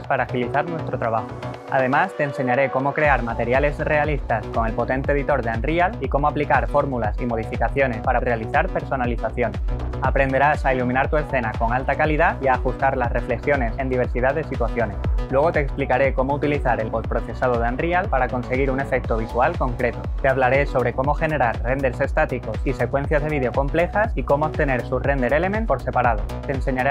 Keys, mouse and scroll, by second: 2.7 click, 4.0 click.